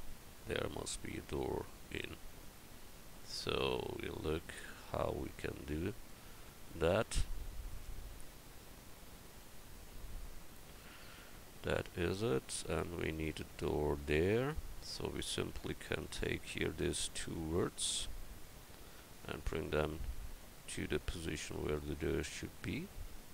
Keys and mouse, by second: 6.3-9.5 right drag, 10.7 Tab.